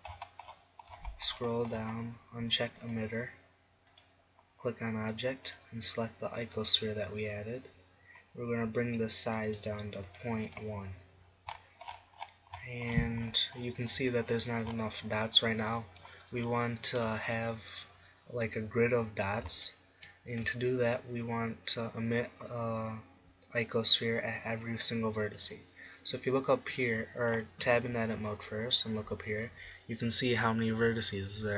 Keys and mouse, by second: 9.7-11.1 middle drag, 12.1 middle click, 16.0-17.4 middle drag, 18.7-20.1 middle drag, 27.9-29.9 middle drag, 28.3 Tab.